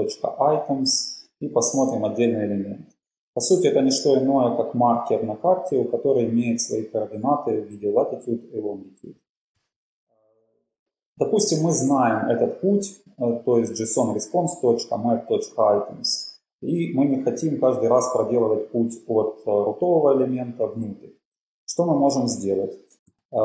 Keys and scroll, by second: 0.3-3.2 typing, 9.5-10.2 typing.